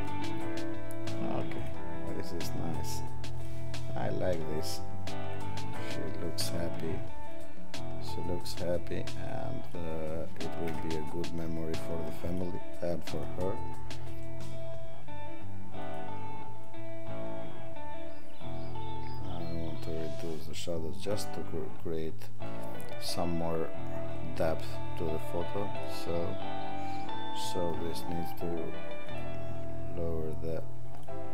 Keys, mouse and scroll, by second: 3.3 click, 9.2 click, 13.2 click.